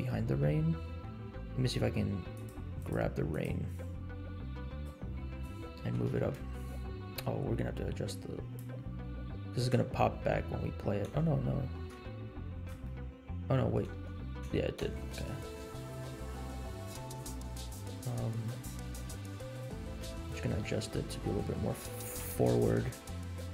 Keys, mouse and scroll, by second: 2.5 click, 3.4 click, 4.8-5.3 drag, 5.3-5.6 drag, 6.1 g, 8.0 click, 9.8 space, 11.1 space, 11.3 scroll up 3, 11.7 g, 12.9 shift+middle click, 13.5 middle click, 14.0 space, 14.8 space, 15.7-17.2 drag, 19.4 click, 20.5 middle click, 21.1 scroll down 1, 22.1 KP_7, 22.7 g.